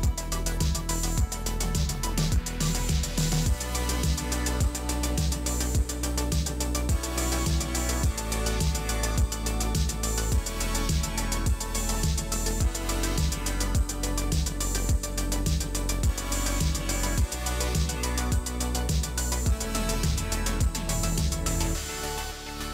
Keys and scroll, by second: 0.5 space, 4.7 space, 6.9 space, 8.8 space, 9.8 space.